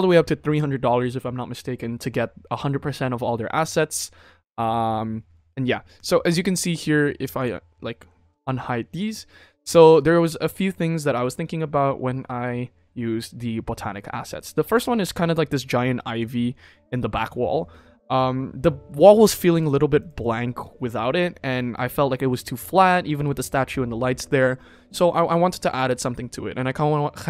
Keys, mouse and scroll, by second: 7.4 click, 9.4 click, 14.6 click, 16.1 click, 19.5 click, 19.9 click, 20.1 click, 24.9 click.